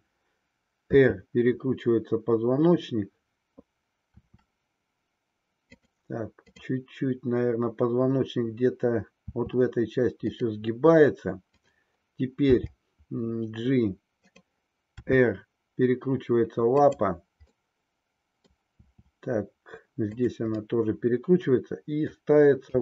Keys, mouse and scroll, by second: 0.9 e, 4.1 r, 5.8 click, 6.6-8.3 drag, 9.1 r, 12.9 g, 14.4 click, 15.1 r, 17.6 middle click, 18.9 r, 20.6-22.2 middle drag.